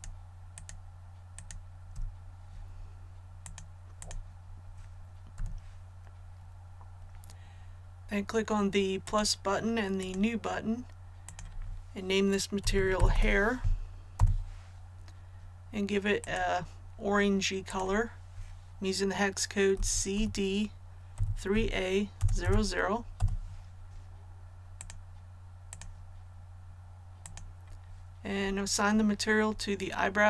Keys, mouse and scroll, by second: 0.5 shift+right click, 1.3 shift+right click, 3.4 click, 5.3 a, 9.0 click, 12.6-13.1 typing, 14.1 Return, 16.2 click, 19.7-22.2 typing, 24.8 click.